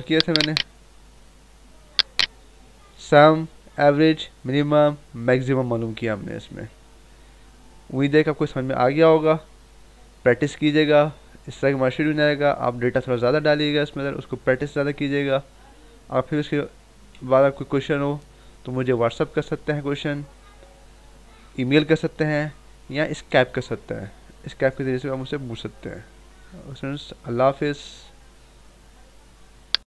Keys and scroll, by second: 17.1 Right.